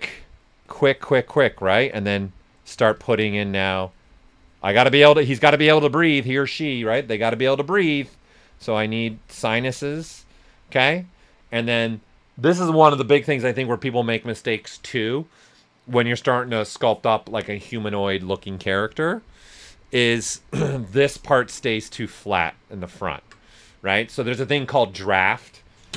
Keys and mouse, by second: 1.4 right click, 1.7 s, 1.8 click, 2.5 alt+right click, 3.5-5.3 alt+drag, 5.3 s, 5.4 click, 6.5 s, 6.7 click, 7.8-10.1 alt+drag, 10.1 typing, 10.1 right click, 21.5 right click, 22.6 ctrl+right click.